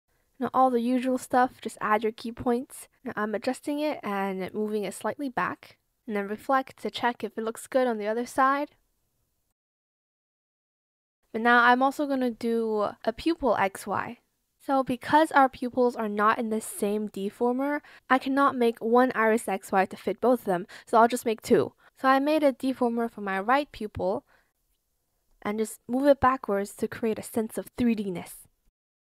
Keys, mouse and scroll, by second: 3.1 shift+click, 3.4 shift+click, 4.6 shift+click, 5.0 shift+click, 5.9 ctrl+z, 6.9 Return, 10.0 ctrl+click, 10.5 ctrl+Return, 17.8-20.0 typing, 23.3 shift+click, 23.8 shift+click, 26.2 shift+click, 28.8 shift+click.